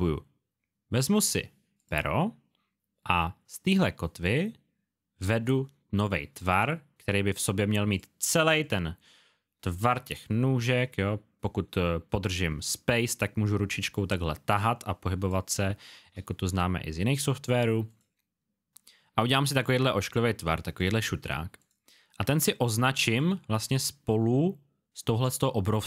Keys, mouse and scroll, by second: 10.3 click, 15.3 space, 17.9 click.